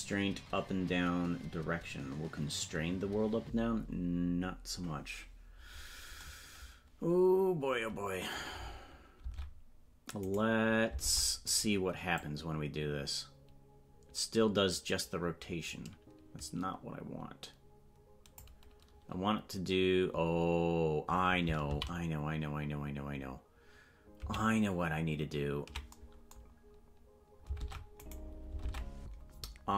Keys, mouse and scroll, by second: 9.2 ctrl+Tab, 10.3 right click, 11.0 ctrl+Tab, 11.5 right click, 12.1-18.4 drag, 27.6 ctrl+Tab, 28.1 right click, 28.6 ctrl+Tab.